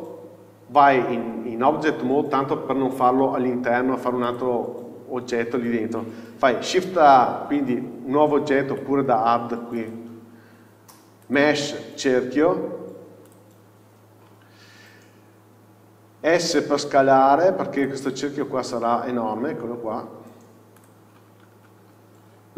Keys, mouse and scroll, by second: 0.0 Tab, 4.5 click, 5.5-7.1 scroll up 1, 13.5-18.0 drag, 16.8 s, 18.2 scroll down 1, 19.8 scroll up 1, 20.2 s, 21.0 click, 21.2 scroll up 1, 22.4 s.